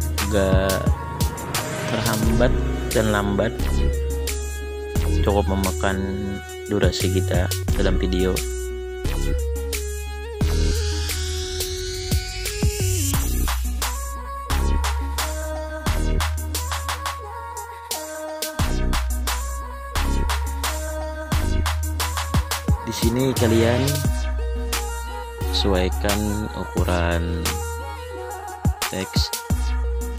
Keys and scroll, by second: 0.0-0.3 typing, 5.3-11.8 typing, 16.9-20.9 typing.